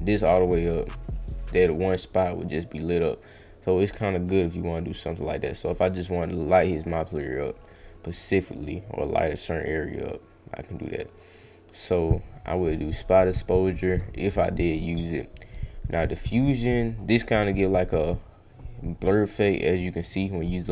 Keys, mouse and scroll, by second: 3.3 click, 4.1 click, 5.4 click, 6.5 click, 7.7 click, 9.0-11.4 drag, 13.9 click, 15.4 click, 15.8 click, 16.1 click, 19.1 click, 19.6 click, 19.9 click, 20.2 click.